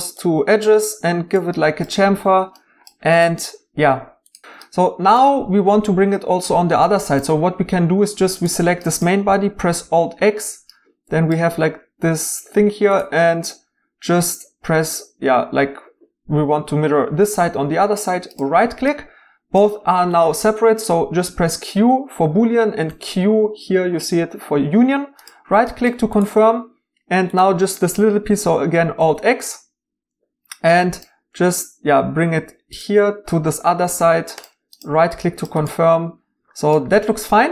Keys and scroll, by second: 4.4 x, 21.4 q, 22.9 q.